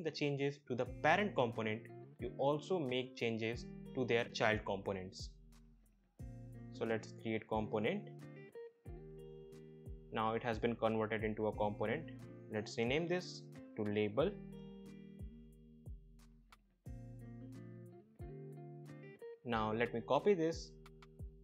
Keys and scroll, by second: 13.2-14.7 typing, 14.9 Return, 20.4 ctrl+c.